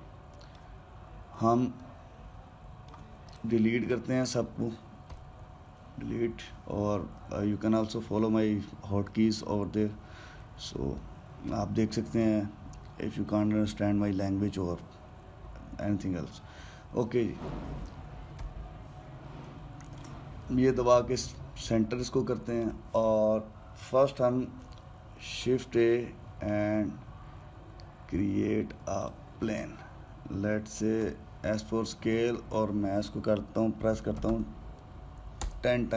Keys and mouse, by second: 0.0-4.1 middle drag, 4.1 click, 5.9 Delete, 11.7-14.8 middle drag, 19.1 KP_Decimal, 20.7 shift+c, 21.6 middle click, 22.1-25.2 ctrl+middle drag, 26.1 shift+a, 31.8 s.